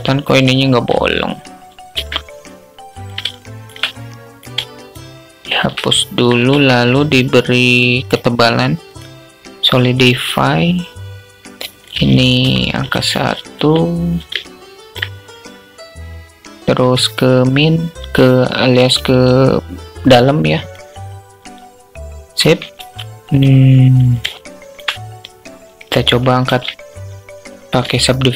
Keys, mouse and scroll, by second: 1.3 x, 2.7 alt+shift+click, 3.3 click, 4.2 alt+shift+click, 4.5 alt+shift+click, 5.2 middle click, 5.4 alt+click, 5.8 Tab, 8.2-9.5 drag, 11.2-13.1 drag, 13.8-14.3 alt+drag, 16.2-20.1 drag, 23.7-24.1 alt+shift+drag, 26.1 ctrl+3, 27.4-27.7 alt+shift+drag.